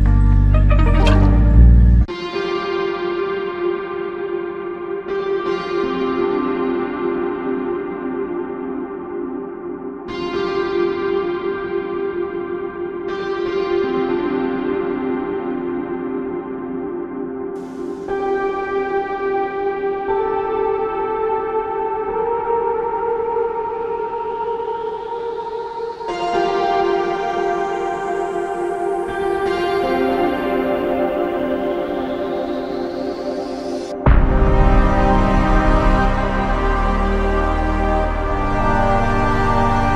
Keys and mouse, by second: 0.3 w, 1.8 alt+click, 8.3 alt+click, 14.7 ctrl+click, 16.5 alt+click, 19.7 ctrl+click, 22.2 ctrl+click, 25.2 ctrl+click, 26.2 ctrl+click, 26.9 ctrl+click, 30.5 alt+click, 31.7 alt+click, 39.8 ctrl+click.